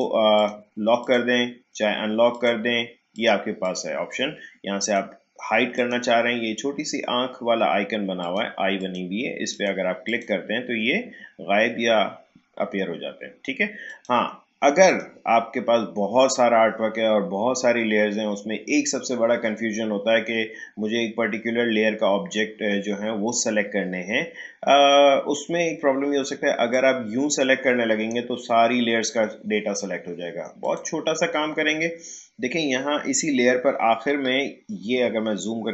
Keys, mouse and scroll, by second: 8.2 click, 13.8 click, 26.7-30.6 drag, 35.0 click.